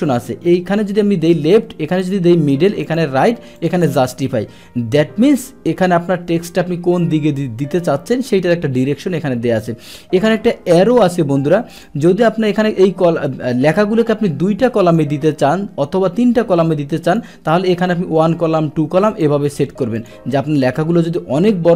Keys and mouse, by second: 2.0 click, 2.9 click, 3.6 click, 11.7 click, 14.8 click, 17.1 click, 19.1 click, 20.0 click.